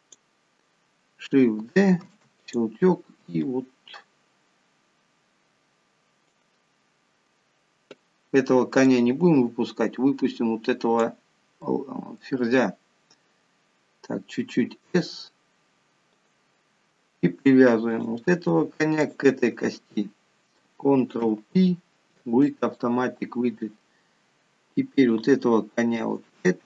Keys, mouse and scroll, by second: 2.3 shift+d, 3.7 click, 9.1 click, 11.8 middle click, 12.9 scroll up 3, 15.0 s, 18.1 click, 19.3 shift+click, 21.5 ctrl+p, 25.4 click, 26.2 shift+click.